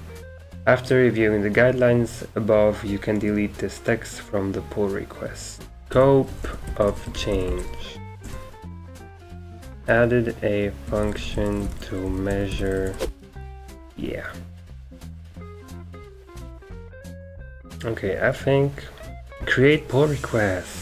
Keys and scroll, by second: 5.8 Left, 5.8 Return, 5.8 Up, 5.8-13.4 typing, 8.2 Return.